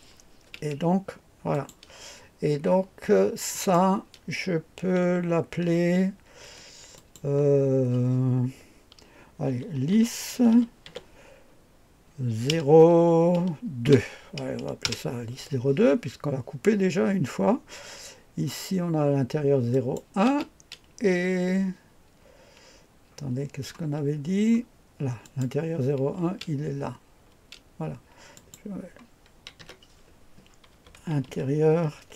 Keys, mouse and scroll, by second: 1.5 click, 3.5 click, 6.4 F2, 6.9 click, 9.2-12.5 typing, 13.8 KP_2, 14.8 Return, 15.9-16.5 scroll down 1, 19.7 click, 20.2 space, 20.7 space, 25.2 click, 26.2 space, 27.3 space, 28.3 click, 29.6 F2, 30.5-32.1 typing.